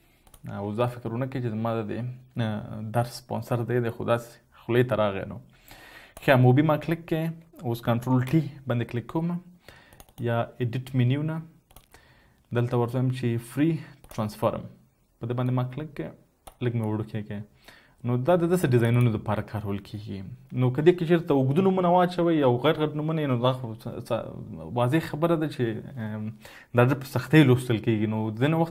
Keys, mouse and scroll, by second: 5.8 typing, 8.7-9.5 typing, 11.4 double click, 20.3 double click.